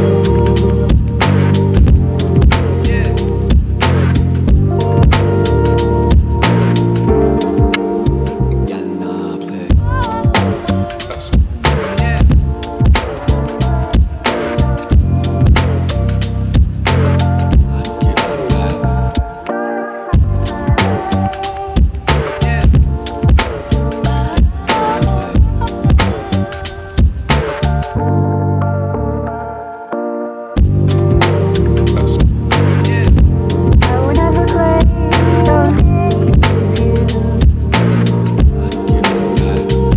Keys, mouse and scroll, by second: 1.1 ctrl+shift+z, 1.6 click, 2.1-2.4 scroll down 1, 2.4 KP_Decimal, 3.4-3.8 drag, 6.3 click, 7.9 click, 9.0 Tab, 9.3-10.4 scroll up 5, 9.7 ctrl+s, 11.1 c, 12.0 click, 12.1-12.7 scroll up 2, 12.5 right click, 12.7 scroll down 2, 12.8-13.7 scroll up 2, 13.0 c, 14.0 click, 14.9 click, 15.2 right click, 15.6 click, 16.3 click, 16.8 c, 17.4 drag, 17.6 click, 17.9 drag, 18.4 right click, 19.0 click, 19.5-20.1 drag, 20.4 c, 20.8 click, 21.2 scroll up 2, 21.4 click, 22.5 right click, 22.5-22.8 scroll down 2, 22.8-23.4 drag, 23.7 Tab, 27.0 shift+d, 27.7 right click, 28.5-29.6 scroll down 1, 30.4 click, 32.4 Tab, 33.7 KP_Decimal, 35.8 ctrl+i, 36.7 x.